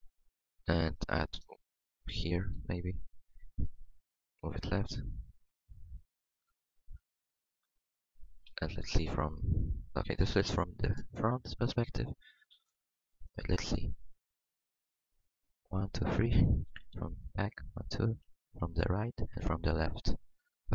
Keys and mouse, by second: 3.8 v, 5.3 g, 8.4 KP_3, 9.0 ctrl+KP_3, 9.6 KP_1, 11.9-13.1 middle drag, 13.1 a, 13.5 Tab, 16.9 ctrl+KP_3, 18.2 KP_3.